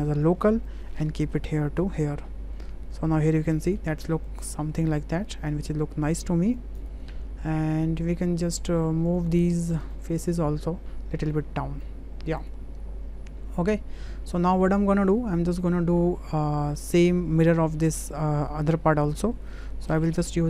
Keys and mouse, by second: 0.7-3.7 drag, 4.4 click, 5.6 click, 7.8 click, 9.2-10.1 drag, 10.7-11.8 drag, 12.4 click, 13.5 Tab, 14.6-15.1 drag, 16.8 click, 19.0 middle drag, 19.5 middle click, 19.9 middle click.